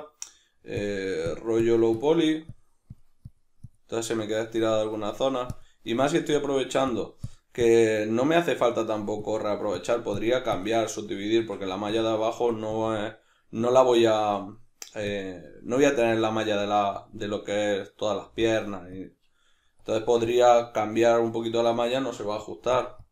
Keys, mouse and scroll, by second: 0.7-4.2 drag, 4.2-5.5 middle drag, 5.5 click, 5.9-6.9 middle drag, 6.9-10.8 drag, 10.8-11.9 middle drag, 11.9-13.6 drag, 13.6-15.1 middle drag, 15.1 click, 15.5 middle click, 16.2-17.4 drag, 17.4-18.4 middle drag, 18.4-20.8 drag, 20.8-22.8 middle drag, 22.4 f, 23.0-23.1 drag.